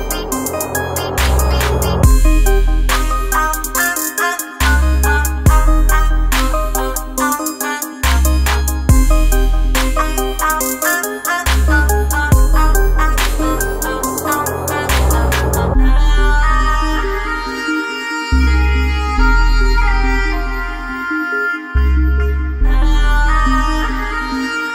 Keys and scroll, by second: 3.7 x, 11.5 ctrl+-, 11.6 ctrl+-, 13.6 ctrl+-.